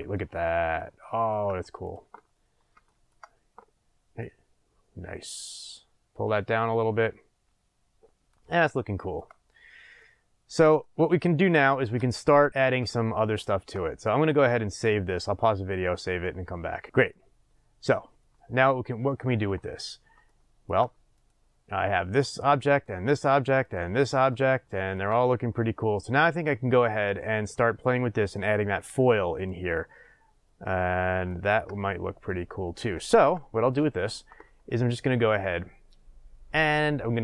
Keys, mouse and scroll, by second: 1.8 click, 2.4 scroll down 1, 2.8-4.2 shift+middle drag, 4.2-8.7 drag, 8.7-16.8 shift+middle drag, 9.3 scroll down 1, 16.8 click, 16.9-21.1 shift+middle drag, 19.7-20.2 scroll, 21.1 click, 22.7 click, 23.6 click, 24.3-33.7 shift+middle drag, 26.0-28.9 scroll up 2, 28.9-30.7 scroll up 1, 30.7-31.2 scroll up 1, 33.7 click.